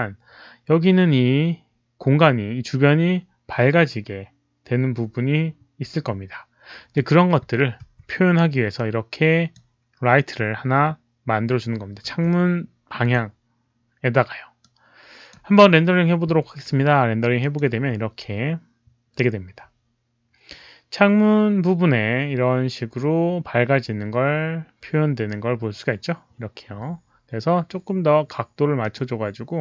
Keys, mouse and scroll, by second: 7.7 r, 8.7 click, 9.1 r, 12.0-13.5 typing, 13.0 click, 14.5 click, 17.3 click, 19.7-20.4 typing, 19.9 click, 28.7 click.